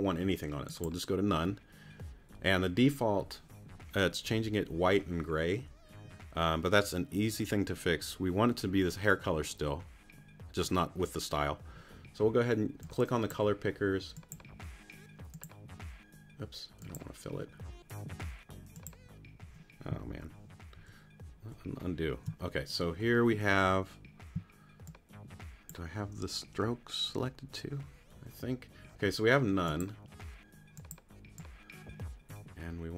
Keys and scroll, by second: 20.0 super+z.